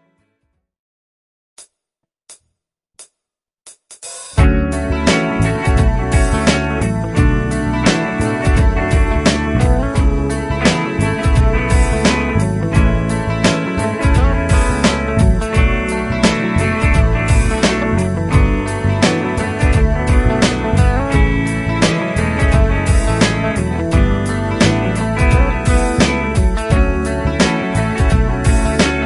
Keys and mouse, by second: 1.4-3.0 typing, 2.4 Caps_Lock, 4.0-5.5 typing, 10.5 F2, 11.6 F2, 17.8 ctrl+Down, 18.1 ctrl+Down, 18.6 ctrl+Up, 19.9 shift+click, 22.6 shift+click.